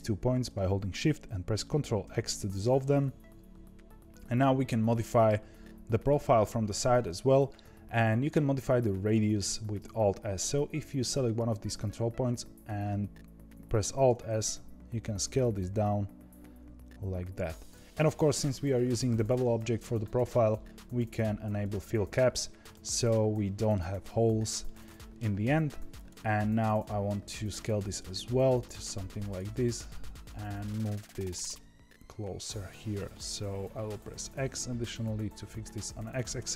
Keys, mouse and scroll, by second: 2.0 ctrl+x, 10.9 click, 13.8 alt+s, 21.5 click, 22.0 scroll up 1, 22.0-25.9 middle drag, 25.9 click, 26.3-27.7 middle drag, 27.7 alt+s, 29.6 click, 29.9-31.2 middle drag, 31.2 g.